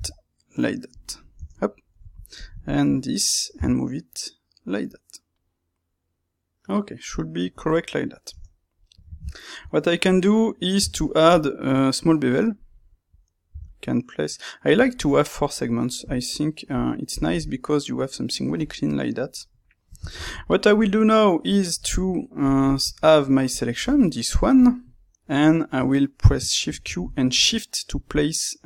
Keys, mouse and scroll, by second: 0.9 click, 1.1-2.3 middle drag, 1.3 Tab, 2.3 click, 2.6 shift+click, 3.5 g, 7.6 click, 7.7-14.7 middle drag, 8.2 Tab, 10.7 space, 17.0 click, 18.5-22.4 middle drag, 22.4 click, 23.4 click, 24.5 click, 24.9-28.6 middle drag, 26.6 shift+q.